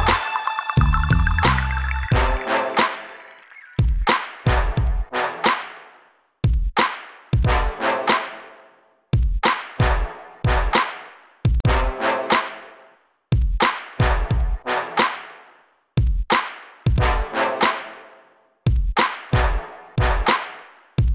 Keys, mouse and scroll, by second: 1.0 click, 6.7 scroll down 1, 7.3 scroll down 1, 10.9 click, 12.4 middle click, 13.8 scroll down 2, 14.7 scroll up 2, 16.8 click, 17.7 scroll up 2, 18.8 scroll down 2, 21.0 click.